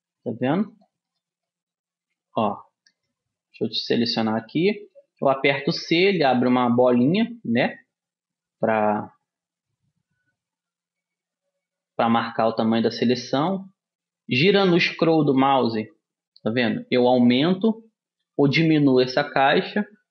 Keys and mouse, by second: 1.2 right click, 1.6-3.0 middle drag, 3.6 a, 5.8 c.